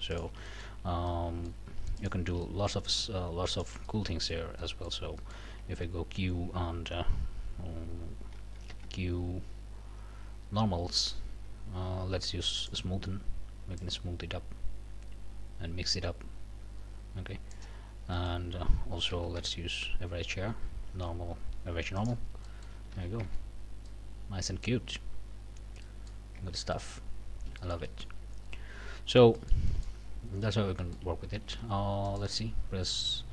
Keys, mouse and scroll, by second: 0.1 alt+shift+click, 0.5 alt+shift+click, 1.1 alt+shift+click, 2.0 alt+shift+click, 2.4 alt+shift+click, 3.5 alt+shift+click, 4.6 click, 5.2 click, 5.7 q, 8.7 q, 12.6 click, 13.8-17.7 drag, 17.9 scroll down 2, 18.1 click, 18.4 a, 19.4 q, 22.0 click, 22.4 click, 22.9 alt+a, 23.2 alt+Tab, 23.6 alt+scroll down 2, 23.9 middle click, 24.8 scroll down 1, 25.2-26.3 scroll up 2, 25.8 middle click, 26.4 Tab, 26.7 middle click, 27.2 scroll up 2, 27.6 shift+middle click, 29.0 scroll down 3, 29.4 shift+middle click, 30.0 shift+scroll up 2, 30.4 shift+click, 30.8 shift+click, 31.3 shift+a, 32.0 alt+shift+click.